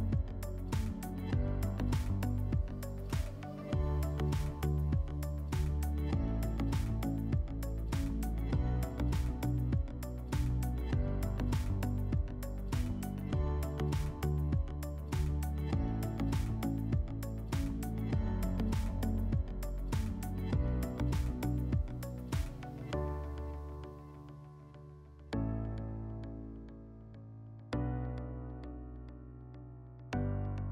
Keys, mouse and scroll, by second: 4.2-5.7 drag, 6.3-7.6 drag, 11.0 click, 15.2 click, 17.8-19.3 drag, 20.2-21.8 drag.